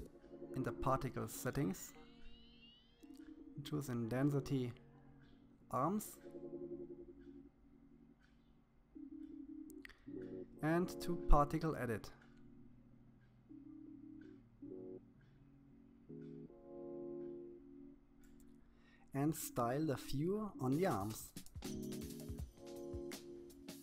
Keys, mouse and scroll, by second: 0.5 click, 1.1-2.7 scroll down 31, 2.7-6.5 drag, 7.6-9.1 drag, 12.7 shift+middle click, 13.4-15.4 scroll up 7, 15.7-16.1 scroll up 1, 16.1-17.6 shift+middle drag, 18.7 click, 19.8 click, 20.7 click, 21.4 middle click, 21.5 KP_1, 21.7 shift+middle click, 22.3 click, 23.3 shift+middle click, 23.5 scroll down 2.